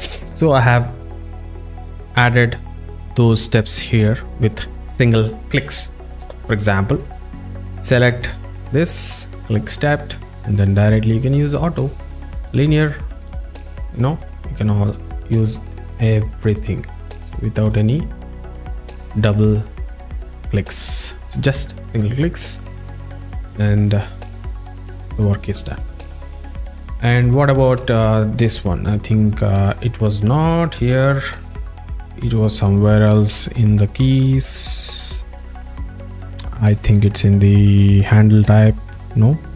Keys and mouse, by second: 8.4 click, 11.2 click, 13.4 a, 14.8 click, 15.2 click, 16.0 click, 16.6 click, 17.7 click, 18.4 click, 18.6 click, 19.5 click, 22.8 click, 24.9 click, 31.0 v, 33.5 alt+middle click, 34.5 click, 35.9-39.5 drag.